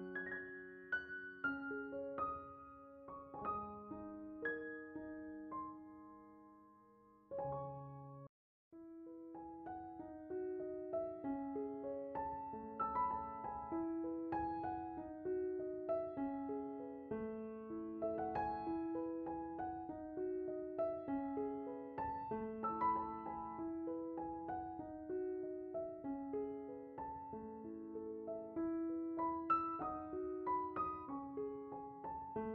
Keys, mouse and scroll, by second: 1.8-2.9 middle drag, 3.4 middle click, 3.9 click, 4.6 shift+d, 7.4-9.3 right drag, 9.3 click, 10.0-10.5 scroll up 3, 10.9-12.2 middle drag, 12.2 click, 12.6-15.3 right drag, 19.7 click, 22.5-22.8 middle drag, 22.8-23.5 scroll down 2, 23.5-24.5 middle drag, 24.9 click, 26.7 middle click, 27.3-27.9 scroll up 2, 27.9 middle click.